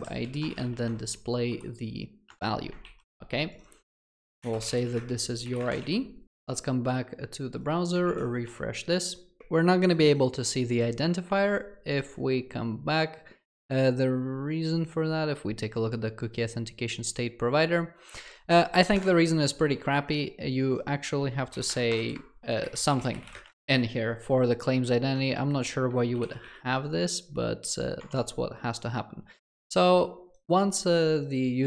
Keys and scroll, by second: 2.3 Return, 26.2 ctrl+alt+l.